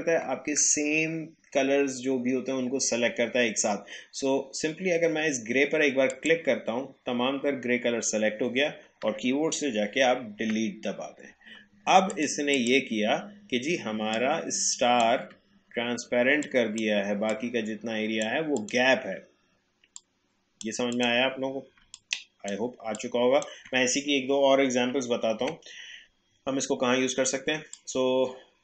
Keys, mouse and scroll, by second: 6.1 click, 10.4 Delete, 12.1 click, 13.2-13.7 alt+scroll down 1, 14.1-16.3 drag, 16.3 space, 16.4 click, 16.8 space, 17.3-20.9 drag, 21.8 space, 21.9 click, 22.3 space, 22.9-25.4 drag, 25.4 Delete, 27.7-28.6 drag.